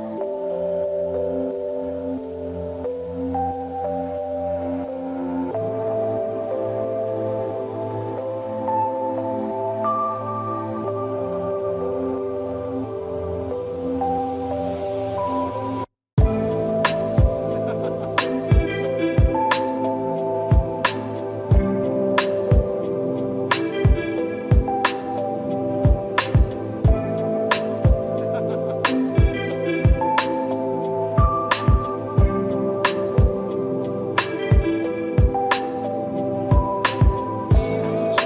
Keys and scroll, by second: 27.2 space, 34.9 space.